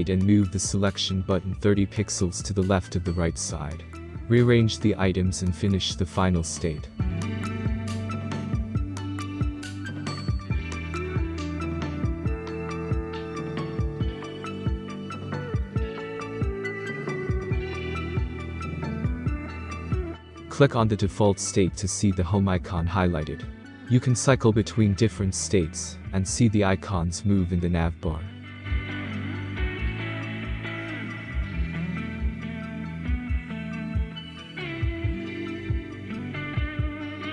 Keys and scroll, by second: 0.1-1.5 typing, 2.1 ctrl+z, 4.4-4.8 Right.